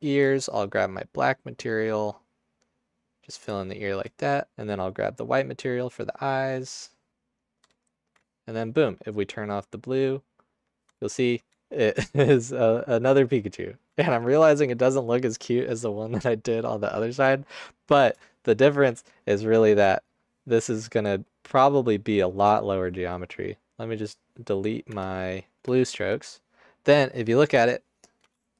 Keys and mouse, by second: 0.9 click, 2.9 click, 5.2 click, 6.1 drag, 19.6 Tab, 24.9 Tab, 25.7 x.